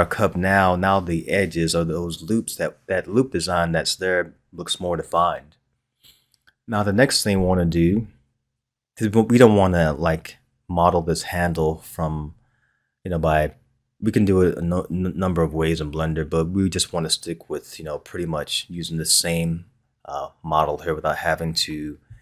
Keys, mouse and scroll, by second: 10.2-11.2 scroll down 1, 17.1-20.2 scroll down 1.